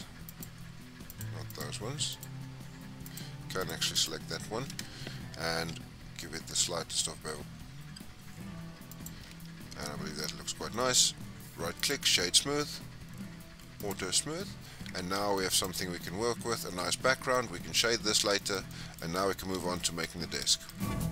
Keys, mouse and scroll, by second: 0.3 alt+shift+click, 1.1 alt+shift+click, 1.5 alt+shift+click, 2.1 alt+shift+click, 3.1 alt+shift+click, 3.6 alt+shift+click, 3.9 alt+shift+click, 5.6 ctrl+b, 9.4 scroll down 1, 9.7 Tab, 10.1-10.7 scroll down 4, 10.7-12.2 right drag, 12.2-12.6 scroll down 3, 12.6-13.4 scroll up 1, 13.8 click, 14.4-15.1 scroll up 6, 15.1-15.6 middle drag, 15.6 click, 15.9 scroll down 6, 16.1-21.1 middle drag.